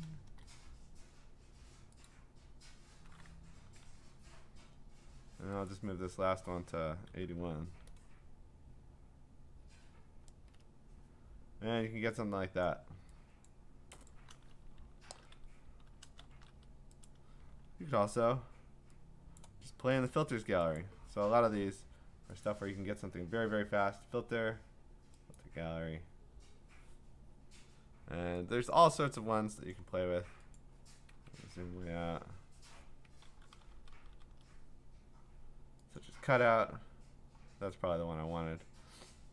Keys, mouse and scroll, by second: 0.0-0.2 typing, 2.1-5.2 drag, 5.7-8.7 drag, 7.1-8.1 typing, 10.4 Return, 12.7 click, 13.4 click, 14.1 click, 15.2 ctrl+z, 16.2 ctrl+shift+z, 17.1 click, 18.0 ctrl+j, 19.4 click, 20.1 click, 20.8 click, 22.5 click, 25.4 click, 28.7 click, 29.8 click, 30.6 click, 31.4-33.4 scroll, 33.4 ctrl+-, 33.6 ctrl+-, 33.8 ctrl+-, 33.9 ctrl+-, 34.1 ctrl+-, 36.0 click.